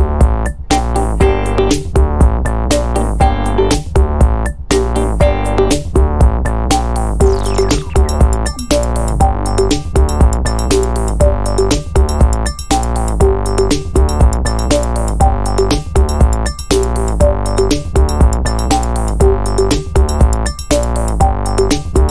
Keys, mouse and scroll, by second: 12.4 0, 13.8 ctrl+z, 16.3-17.9 drag, 20.6-22.1 drag.